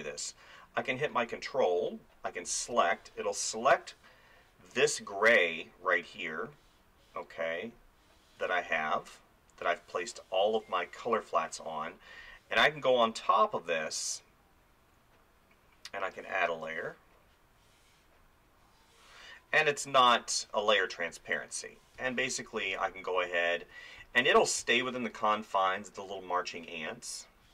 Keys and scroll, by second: 8.4 space, 22.0 space.